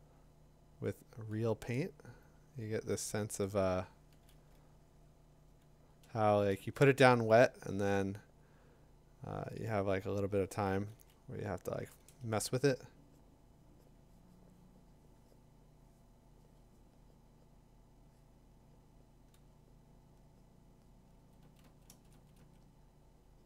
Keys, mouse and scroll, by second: 4.1 [, 4.3 [, 6.0 ], 6.3 ], 10.4 [, 10.7 [, 12.1 ], 12.3 ], 21.2-22.4 typing.